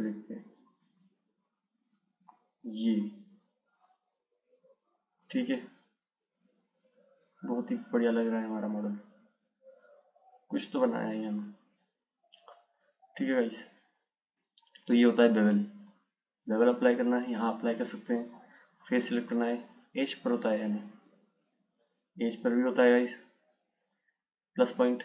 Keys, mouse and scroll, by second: 1.1 click, 6.7 click, 7.5 click, 13.8 click, 16.2-18.0 drag, 21.3 click.